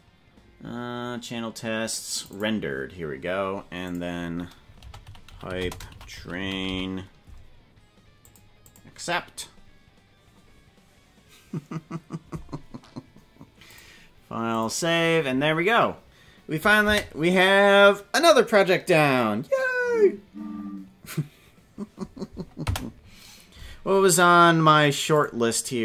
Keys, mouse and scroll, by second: 13.6-15.3 drag, 16.8 space, 22.6 space.